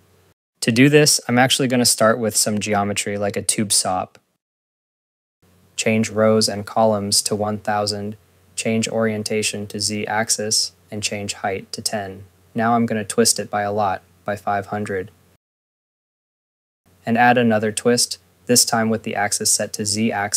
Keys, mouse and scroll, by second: 0.0 scroll, 0.1 click, 0.2 click, 0.3 click, 0.4-1.4 typing, 0.5 click, 1.0 click, 1.2 click, 1.3 click, 1.5 click, 1.7 ctrl+s, 2.0 click, 2.1 scroll, 2.6 Tab, 3.3 click, 3.9-5.0 typing, 5.0 click, 12.3 right click, 12.4-14.0 typing, 13.7 click, 14.2 scroll, 16.9 Return, 17.1 right click, 17.9 Return, 18.3 click.